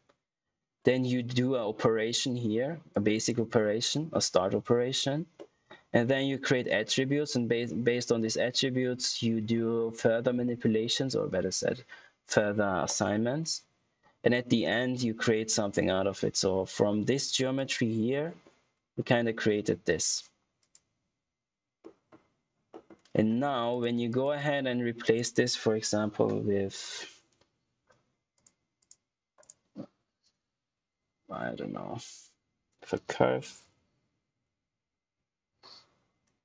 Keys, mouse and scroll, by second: 0.3 scroll up 1, 0.7-1.6 scroll down 1, 2.5-2.8 scroll up 1, 2.8 click, 4.7-5.3 scroll down 1, 5.3 middle click, 5.9 scroll up 1, 8.2 middle click, 9.3-10.4 scroll down 1, 10.4 middle click, 15.4-15.9 scroll down 1, 16.7 scroll up 1, 17.5 click, 18.6-19.0 scroll down 1, 19.0-19.4 scroll, 19.4 middle click, 20.5 click, 21.7 middle click, 22.2 scroll down 1, 22.6 middle click, 23.0-23.4 scroll up 1, 23.6 click, 25.2 right click, 29.3 right click, 32.7-34.1 typing, 35.3 Return.